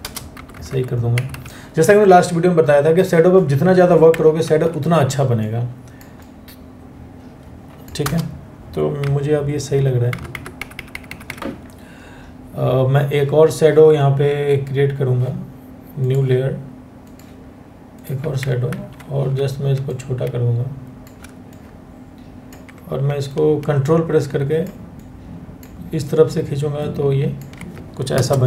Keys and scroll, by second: 0.2 Left, 0.7 Right, 0.9 Right, 4.0 ctrl+t, 7.7 Return, 8.7-9.4 Left, 9.9 Down, 10.2 Right, 10.4 Right, 10.5 Right, 10.9 Right, 18.3 ctrl+t, 27.7 Return.